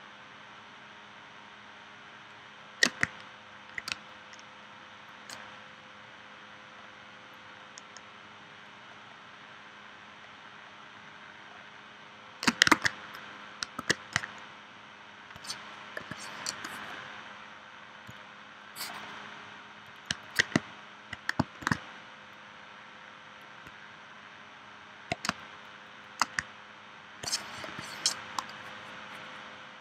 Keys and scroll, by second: 3.9 space, 12.9 super+Tab, 13.8 super+Tab, 16.0 p, 21.6 shift+c, 25.3 space, 27.7 p.